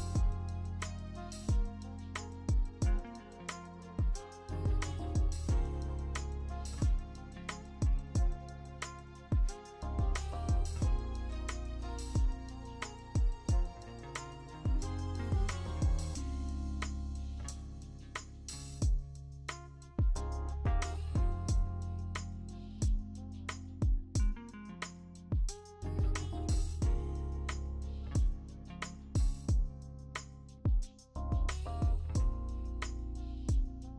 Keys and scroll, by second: 4.3 b, 5.4-11.4 typing, 6.9 ctrl+z, 16.2 x, 17.4 ctrl+d, 19.4 0, 19.7 0, 25.7 ctrl+z, 25.9 x, 26.4 ctrl+z, 26.5 x, 27.3 ctrl+z, 29.9 v, 32.2 b, 33.1 b, 33.3 ctrl+z.